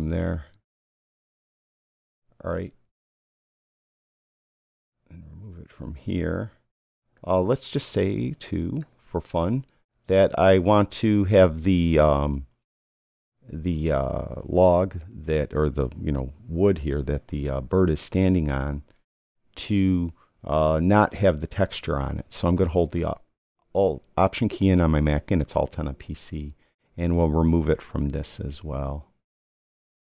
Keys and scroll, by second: 16.3 ].